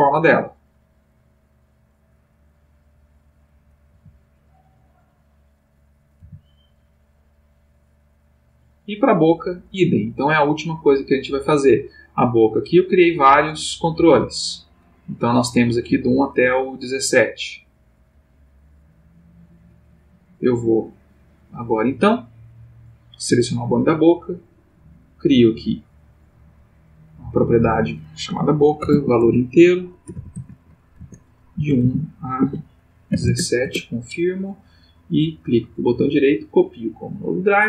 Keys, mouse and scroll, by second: 0.7 click, 1.8-3.5 drag, 3.9 g, 5.3 click, 6.0 click, 6.2 g, 7.3 click, 8.3 click, 11.3 click, 12.6-17.4 drag, 18.1-21.7 drag, 22.7 click, 24.5 click, 24.9 middle click, 25.4 click, 26.8 click, 27.5 click, 28.6-31.5 typing, 29.2 shift+Tab, 30.3 Tab, 30.9 Tab, 33.1 7, 33.2 Return, 35.0 right click, 36.3 click.